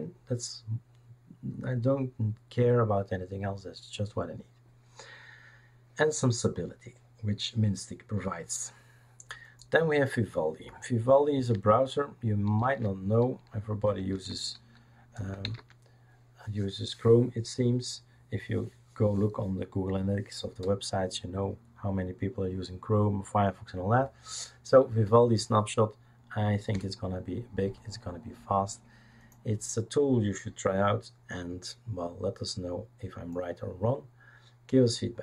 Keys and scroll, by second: 12.6 shift+super+d, 13.8-16.0 typing, 26.7 Return.